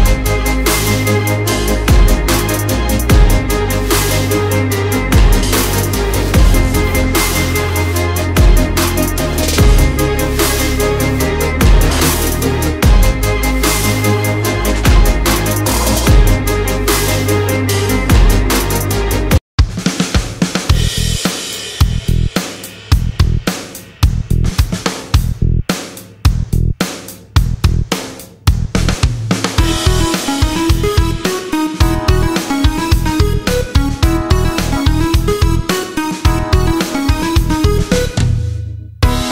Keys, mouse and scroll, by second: 0.2-4.6 typing, 5.5 click, 7.3 click, 7.5-8.4 alt+scroll, 8.4 alt+scroll up 1, 9.5 click, 11.8 click.